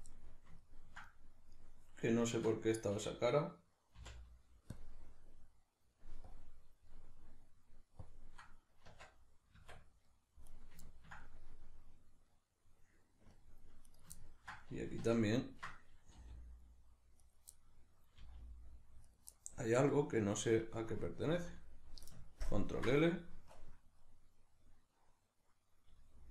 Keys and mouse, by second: 3.9 x, 6.3 click, 6.9-8.1 middle drag, 8.1 click, 8.9 Tab, 10.1 middle click, 10.5 right click, 10.8-13.9 ctrl+middle drag, 13.9 right click, 14.2-17.3 ctrl+middle drag, 16.2 g, 17.3 right click, 17.6-19.2 middle drag, 18.2 g, 19.2 right click, 19.4-26.3 middle drag, 21.3 z, 22.5 ctrl+KP_Add, 23.6 KP_Decimal.